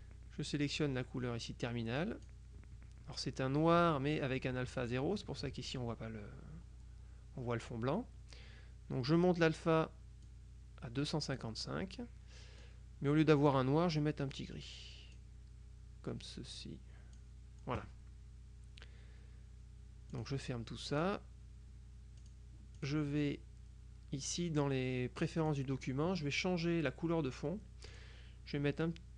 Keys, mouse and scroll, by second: 10.3-11.9 drag, 12.7 click, 14.4-15.7 drag, 16.6-17.7 drag, 20.2 click, 21.0 click, 22.3 click, 25.5 click, 28.0 click.